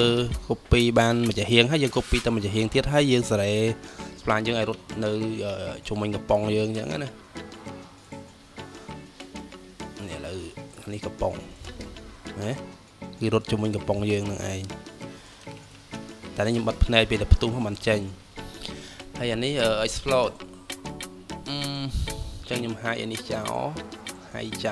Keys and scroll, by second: 15.6 ctrl+z.